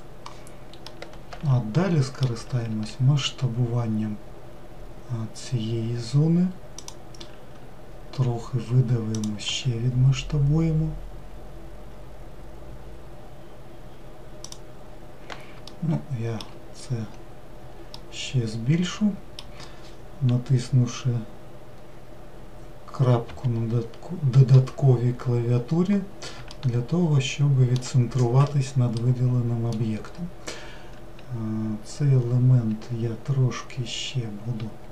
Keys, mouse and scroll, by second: 0.9-2.8 middle drag, 2.8 s, 15.7-17.1 shift+middle drag, 17.1-17.8 scroll up 1, 18.0-21.1 middle drag, 23.3 KP_Decimal, 25.1-25.6 scroll down 2, 26.6-28.2 shift+middle drag, 28.2 scroll down 1, 29.0-32.2 middle drag.